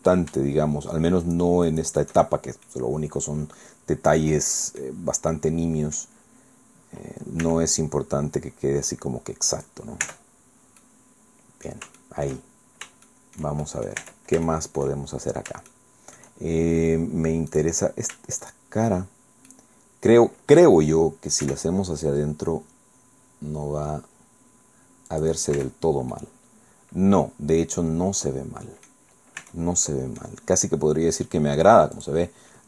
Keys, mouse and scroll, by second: 1.2 shift+right click, 1.7 shift+right click, 2.3 shift+middle click, 2.6-5.0 drag, 5.3 click, 7.4 e, 9.6 click, 10.0 Tab, 10.4 scroll down 1, 10.8-11.8 middle drag, 12.0 shift+click, 12.6-12.9 shift+scroll up 1, 13.0 shift+click, 14.0 shift+Tab, 14.0 shift+click, 14.4 shift+middle click, 14.8-15.4 shift+scroll up 5, 15.7 shift+middle click, 17.5 middle click, 18.4 shift+middle click, 19.0 shift+scroll down 2, 19.5-20.8 drag, 21.4 e, 25.1 click, 25.6 Tab, 25.8 scroll down 1, 26.1-29.1 drag, 29.2 scroll up 1, 29.4 Tab, 29.8 middle click, 32.0 click.